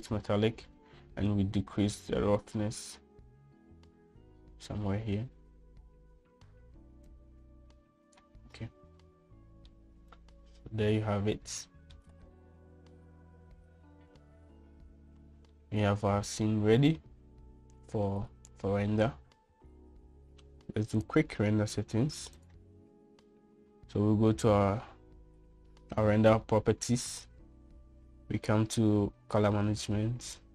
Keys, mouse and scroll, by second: 2.4-4.1 drag, 8.2-9.4 drag, 10.9-13.1 middle drag, 16.7 shift+middle click, 22.1 click.